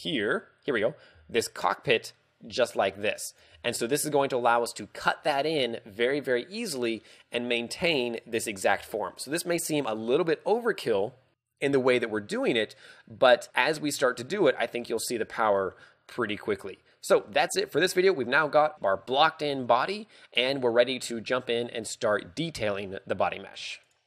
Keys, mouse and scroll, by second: 1.2 d, 1.4 click, 3.6 z, 8.8 d, 9.4 right click, 17.8 shift+middle click, 18.3-18.8 scroll down 1, 18.8-20.3 scroll up 1.